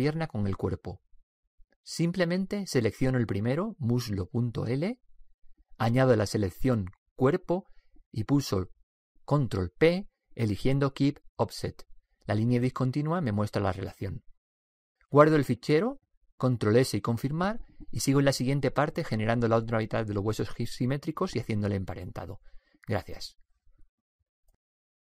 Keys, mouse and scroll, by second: 4.2 right click, 8.5-10.2 right drag, 10.4 ctrl+p, 16.6-18.5 drag.